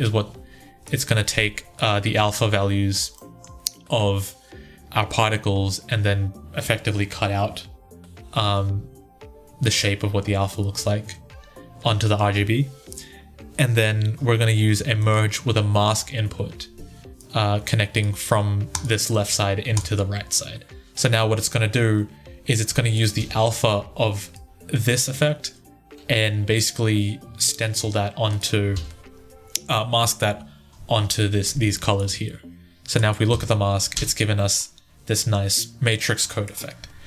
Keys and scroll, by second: 2.0 1, 23.0 1, 28.5 1, 31.9 1, 33.1 1.